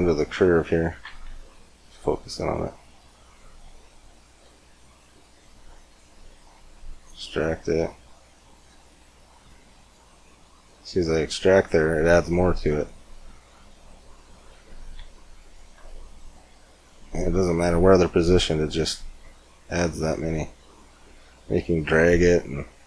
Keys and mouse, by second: 1.1 KP_Decimal, 4.3 Tab, 6.2 e, 7.6 e, 11.2 e, 12.7 e, 14.1-16.0 drag, 14.8 e, 15.6 e, 16.3 e, 19.5 e.